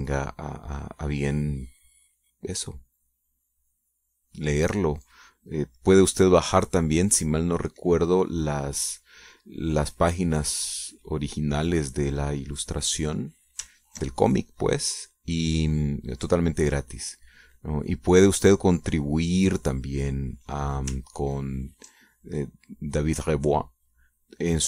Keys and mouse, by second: 6.4 middle click, 7.5 middle click, 8.0 click, 8.2 middle click, 8.4 click, 8.8 click, 9.9-10.9 drag, 10.9 click, 11.1 middle click, 11.4 click, 12.1 click, 14.4 ctrl+click, 14.8-21.5 ctrl+drag, 21.7 ctrl+click, 22.8-24.6 ctrl+drag.